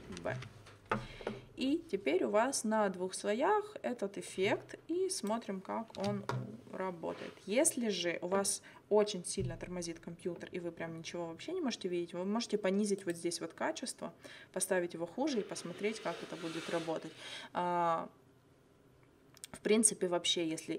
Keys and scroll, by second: 0.3 ctrl+v, 6.0 space.